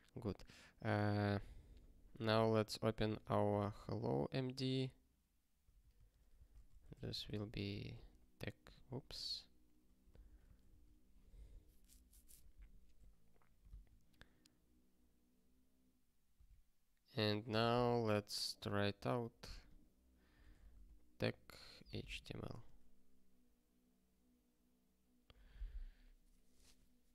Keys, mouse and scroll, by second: 2.0 click, 2.3 super+b, 5.8 ctrl+n, 5.9 ctrl+e, 6.3 ,, 6.5 space, 6.7 t, 7.3 ctrl+s, 7.9 ctrl+k, 8.7 ctrl+/, 9.6 ctrl+s, 10.1 super+b, 11.1 ctrl+k, 13.6 ctrl+k.